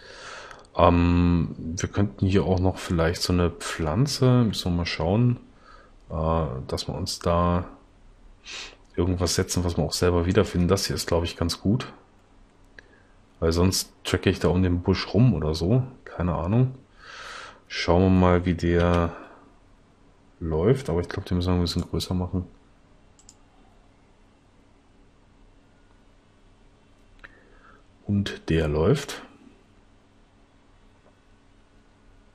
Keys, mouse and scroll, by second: 19.0 l, 21.2 s.